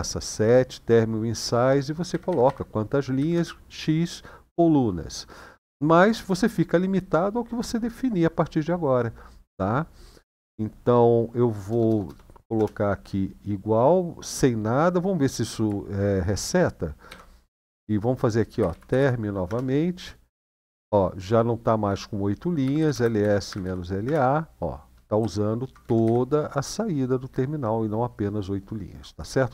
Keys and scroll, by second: 1.9 Left, 2.0 Left, 2.2 Left, 2.9 Right, 3.1 Right, 10.1 Right, 11.4 BackSpace, 11.6 BackSpace, 11.8 BackSpace, 12.3 Return, 16.9 shift+;, 18.3-19.2 typing, 22.4-23.8 typing, 24.9-25.8 typing.